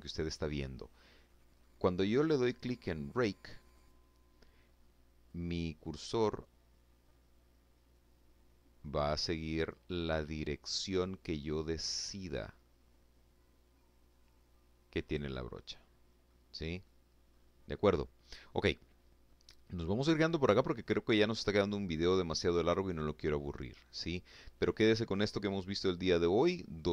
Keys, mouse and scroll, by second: 0.2 middle click, 1.9 click, 2.5 click, 4.1-14.2 drag, 14.6 scroll down 2, 15.1 click, 16.2 scroll up 2, 16.6-17.4 scroll down 2, 17.4 scroll up 2, 17.6 scroll down 2, 18.1-19.7 drag, 20.2-21.4 drag, 21.8-23.2 drag, 24.3 scroll up 1, 24.7-26.4 middle drag, 26.4 click.